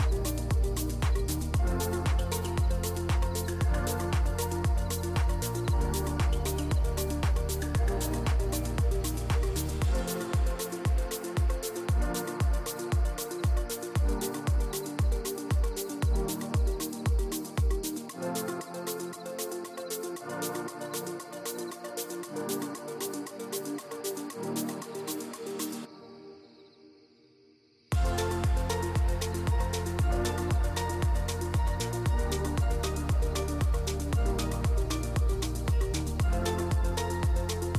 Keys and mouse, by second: 2.8 s, 4.1 g, 5.5 ctrl+a, 6.6-7.0 drag, 7.3 shift+click, 7.8 middle drag, 8.8-10.0 middle drag, 10.3 q, 11.1 Tab, 11.7 3, 12.3 alt+click, 13.5 shift+d, 14.4 p, 15.1 Tab, 15.4 click, 15.8 Tab, 16.1 Tab, 16.7 Tab, 16.9 a, 17.5 click, 17.7 alt+e, 20.8 a, 21.4 shift+n, 22.4 /, 22.6 click, 23.4 3, 23.9 middle click, 24.7 middle click, 25.0-26.3 middle drag, 26.7 click, 27.6 shift+click, 28.0-29.1 shift+drag, 29.7 KP_3, 30.7 /, 31.0 click, 31.8 e, 34.3 z, 34.9 click, 36.0 s, 37.6 s.